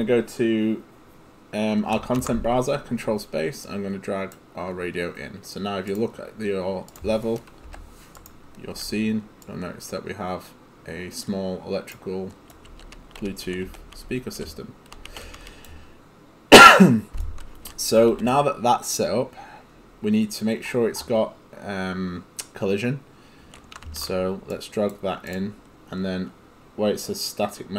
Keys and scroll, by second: 2.0 ctrl+space, 7.7 Delete, 8.8 e, 12.7-15.4 typing, 17.7 s, 18.1 d, 23.9 ctrl+space.